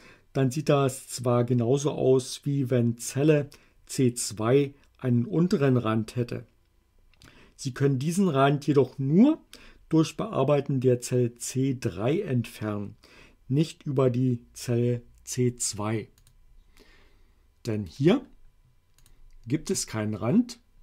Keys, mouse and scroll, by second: 16.2 click, 17.8 right click, 19.0 click.